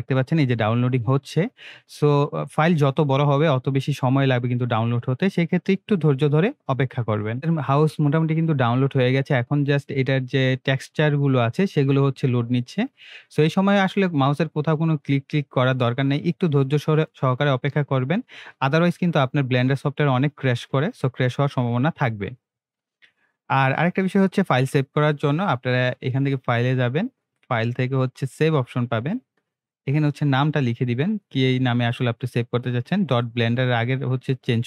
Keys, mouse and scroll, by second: 27.2 click, 31.2-34.6 drag.